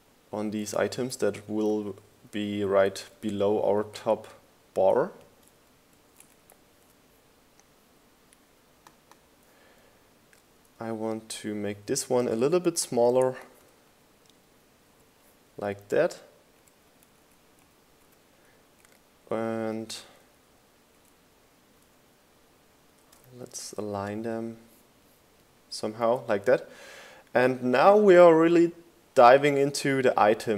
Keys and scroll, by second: 3.0 Left, 4.4 Right, 7.5 Right, 8.7 Right, 15.4 Down, 16.4 Up, 18.1 Down, 18.7 Up, 19.1 Down, 19.5 Up, 20.2 Right, 21.1 Left, 21.4 Right, 25.1 Left.